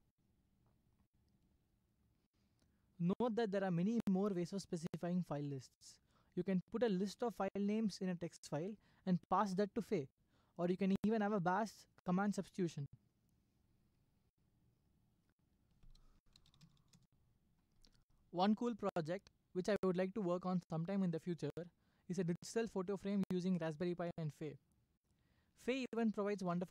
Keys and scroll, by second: 1.3 Escape, 16.1-17.3 typing, 26.1-26.7 typing.